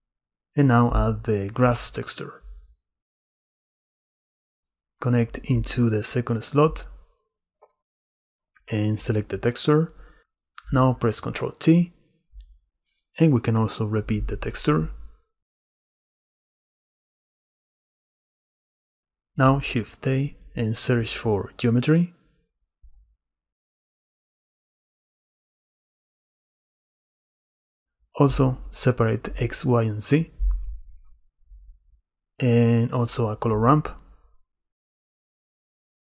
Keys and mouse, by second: 1.2 click, 6.1-7.3 drag, 8.4 click, 11.3 ctrl+i, 11.6 click, 12.3 click, 13.7-14.7 drag, 15.2 click, 16.2-18.1 drag, 18.9 click, 19.6 shift+a, 26.8 shift+a, 33.3 shift+a.